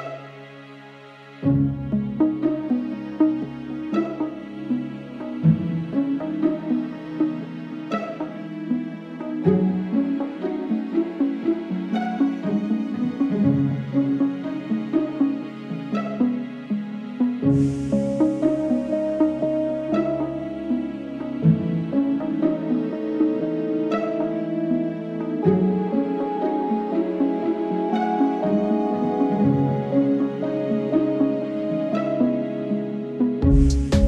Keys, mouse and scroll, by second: 0.0-0.1 typing, 0.1 right click, 0.6 ctrl+z, 1.4 right click, 1.5 right click, 1.8 g, 2.2 ctrl+z, 2.4 ctrl+z, 2.8 g, 3.1 Tab, 3.3 shift+middle click, 3.4 scroll up 1, 3.6 Tab, 4.0 z, 4.1 right drag, 4.4-4.7 scroll down 1, 4.7 Tab, 5.2 z, 6.3 a, 6.5 s, 6.9 s, 9.0 g, 12.8 Tab, 12.9 scroll down 3, 12.9 middle click, 13.3 KP_0, 13.5-13.8 scroll down 1, 13.8-14.2 scroll up 3, 13.9 Tab, 14.0 middle click, 14.2 middle click, 14.7 scroll up 1, 14.9 shift+middle click, 15.4 ctrl+l, 15.6 s, 17.0 shift+middle click, 17.3 KP_1, 18.0 ctrl+KP_3, 18.4 shift+d, 19.9 shift+middle click, 20.2 shift+d, 21.7 g, 23.1 shift+right click, 23.2 shift+middle click, 23.6 shift+right click, 23.9 ctrl+l, 24.2-27.6 typing, 24.4 scroll down 4, 25.0 middle click, 27.3 scroll up 1, 27.3 shift+middle click, 28.5 middle click, 28.9 g, 29.8 Tab, 30.0 KP_0, 30.7 Tab, 31.0 g, 32.4 middle click, 32.7 KP_7, 32.9-33.3 scroll up 3, 33.3 g, 33.9 Tab.